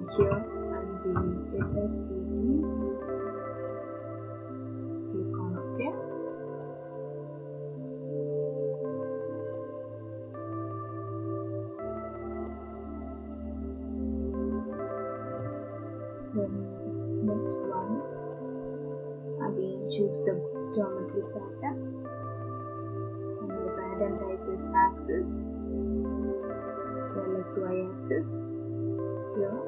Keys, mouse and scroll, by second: 0.2-1.6 typing, 3.8 click, 4.8 typing, 5.6 click, 16.9 click, 20.0 click, 21.0 click, 23.6 click, 24.9 click, 27.5 click, 29.1 click.